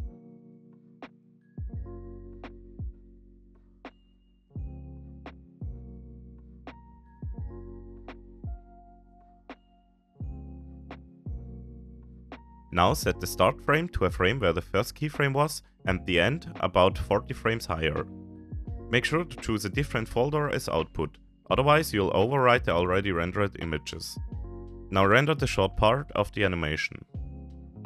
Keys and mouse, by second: 2.0 x, 8.6 click, 14.6-19.7 drag, 22.4-23.6 drag.